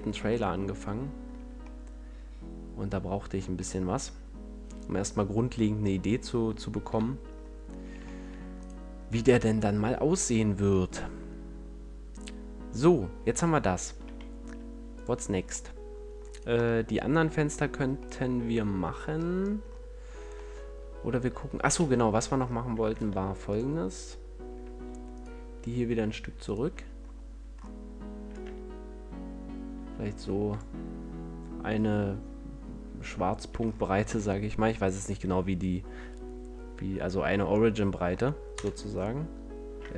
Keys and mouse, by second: 1.3 a, 6.7 KP_1, 14.8-16.2 drag, 16.2 middle click, 21.7 Tab, 22.8 ctrl+Tab, 26.3-30.1 drag, 33.4 a, 38.5 KP_0.